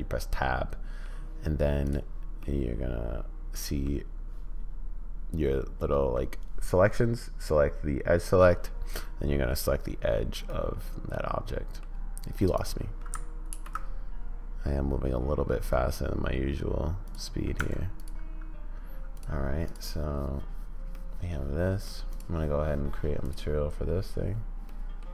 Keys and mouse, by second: 1.8 middle click, 2.5-3.8 middle drag, 8.8 middle click, 10.5 middle click, 13.5 ctrl+b, 17.5 Tab, 19.1 click, 19.6 click, 21.0-21.8 middle drag, 22.1 click, 24.8 middle click.